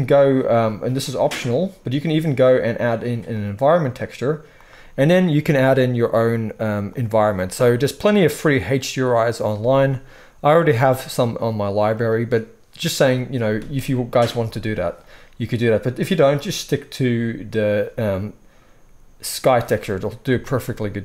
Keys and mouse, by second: 14.5-17.5 middle drag, 17.5-21.0 drag.